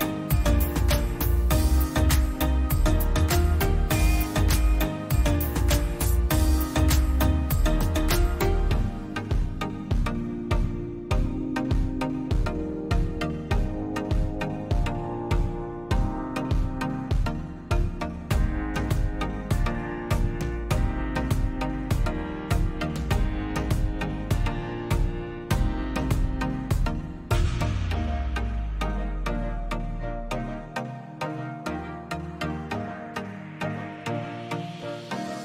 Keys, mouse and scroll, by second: 0.6 click, 1.8 ctrl+shift+], 4.0-4.7 drag, 5.3 Right, 5.4 Right, 5.5 Right, 6.4 Up, 6.4 Left, 6.7 Left, 7.3 Down, 7.9 click, 9.9 click, 11.2 ctrl+g, 12.8 click, 15.9-16.5 drag, 16.9 Right, 17.3 Right, 17.5 Left, 17.7 Right, 18.5-19.0 drag, 20.4 click, 20.7 click, 21.0 Left, 21.2 click, 26.4 click.